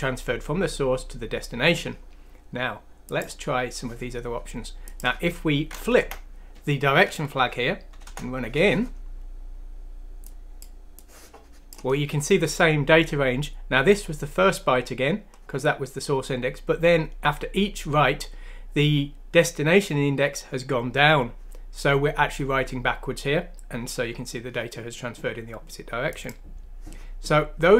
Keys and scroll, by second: 6.0 BackSpace, 7.3 F6, 8.0 Return.